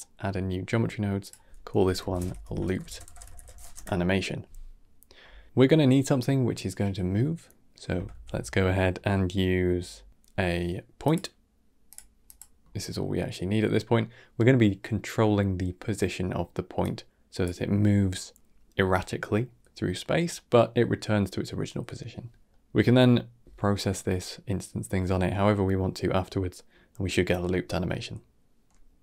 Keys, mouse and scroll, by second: 0.2 middle click, 1.1-2.3 drag, 2.3 o, 8.0 shift+a, 12.5-12.8 scroll up 3, 12.8-16.7 middle drag, 16.7 click, 22.4-25.5 middle drag, 28.5-29.0 middle drag.